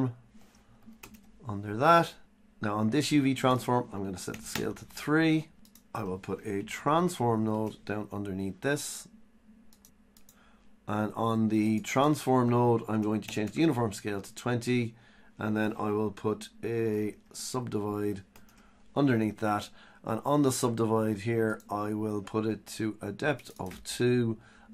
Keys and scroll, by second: 6.0 Tab, 6.8 Tab, 15.6 Tab.